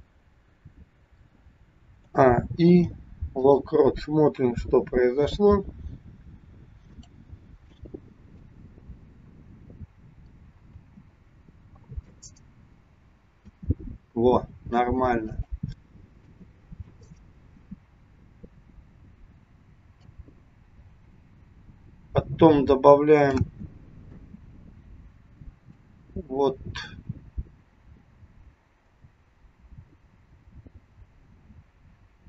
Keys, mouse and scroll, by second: 2.2 a, 2.7 i, 4.3 KP_1, 6.9 click, 8.6 click, 10.8 space, 13.7 space, 15.3 click, 16.1 space, 17.7 space, 20.1 click, 23.4 space, 24.3 space, 25.8 click.